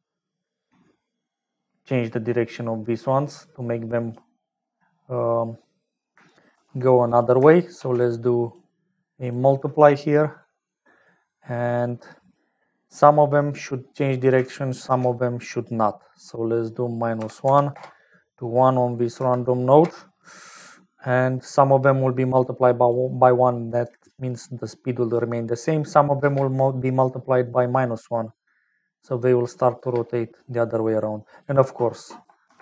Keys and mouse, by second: 7.1 click, 7.8 shift+d, 9.2-10.6 drag, 11.2 click, 13.0 middle click, 14.9 shift+d, 16.2-18.1 drag, 19.1-20.4 drag, 21.0 click, 22.0 click, 23.6 middle click, 24.4 click, 26.5 space, 30.1 space, 30.4 click, 31.4-32.6 drag.